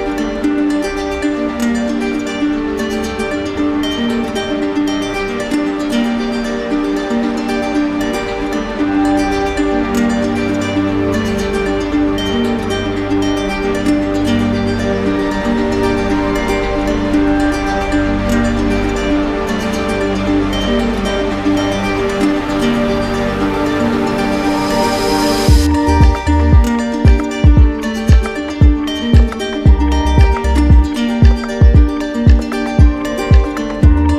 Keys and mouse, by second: 1.9 alt+click, 2.1 ctrl+z, 2.8 right click, 4.0 click, 7.1 alt+click, 9.8 alt+click, 10.3 ctrl+z, 12.7 alt+click, 13.3 ctrl+z, 15.3 alt+click, 15.9 right click, 17.2 right click, 17.8 shift+right click, 23.4 shift+right click, 23.8 ctrl+click, 25.5 ctrl+click, 26.1 right click, 27.7 shift+click, 28.5 shift+click, 29.1 shift+click, 30.4 shift+click, 31.0 shift+click, 32.4 shift+click, 34.0 shift+click.